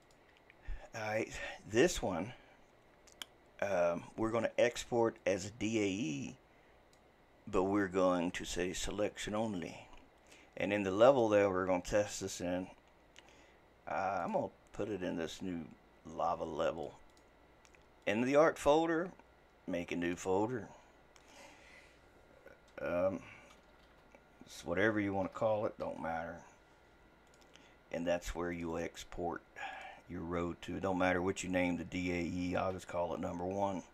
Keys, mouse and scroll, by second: 5.2-8.3 drag.